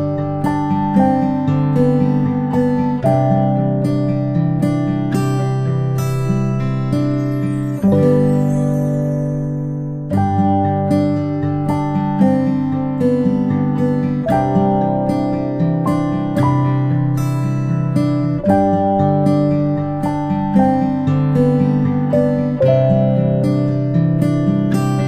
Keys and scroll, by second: 10.9 ctrl+z, 11.5 a.